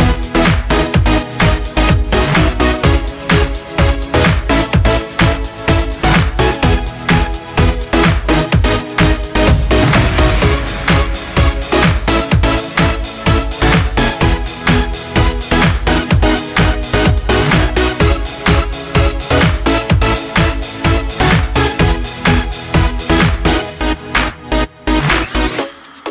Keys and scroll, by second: 5.3 ctrl+z, 12.1 ctrl+z, 13.3 ctrl+alt+z, 14.0 ctrl+alt+z, 16.9 ctrl+z, 18.5 ctrl+z.